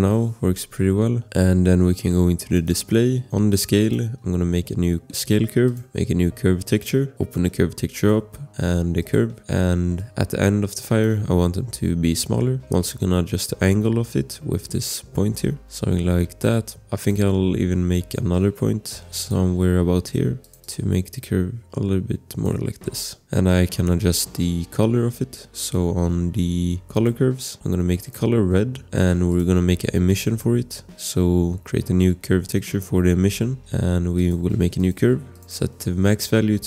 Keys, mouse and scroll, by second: 0.0-0.1 typing, 0.4-1.0 scroll, 1.2 scroll, 2.5 click, 8.4 scroll, 10.4 click, 12.7 click, 18.4 click, 24.6 scroll, 26.9 click, 27.3-28.0 scroll, 28.0 click, 29.3 click, 30.1 click, 33.5 click, 33.5 scroll, 35.4 scroll, 36.3-36.6 typing.